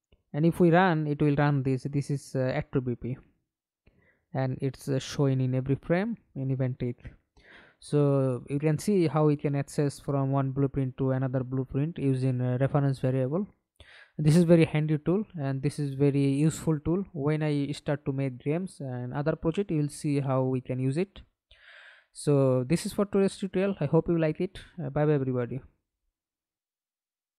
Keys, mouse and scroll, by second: 0.5 double click, 2.8 middle click, 3.6 F11, 4.3 alt+p, 11.0 Escape, 11.8 middle click, 12.7 F11, 27.1 alt+F9.